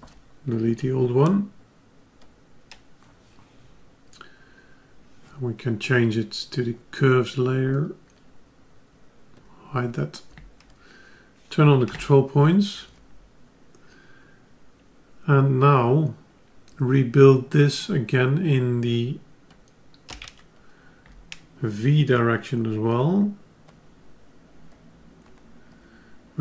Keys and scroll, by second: 11.8 F10.